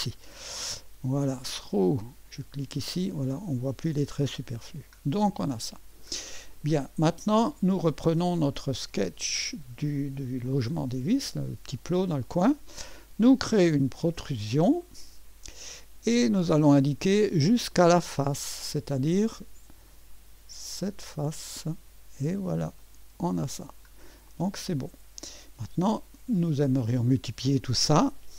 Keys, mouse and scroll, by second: 0.2 click, 0.7 click, 1.5 click, 2.3 click, 5.2 right click, 6.5 click, 9.0 click, 10.4-11.5 drag, 14.1 click, 14.8 click, 14.8 middle click, 14.8 right click, 16.4 click, 17.7 click, 18.4-18.9 scroll up 1, 18.9-20.4 right drag, 21.3 click, 22.8 click, 23.5-24.3 scroll down 1, 24.3-25.4 drag.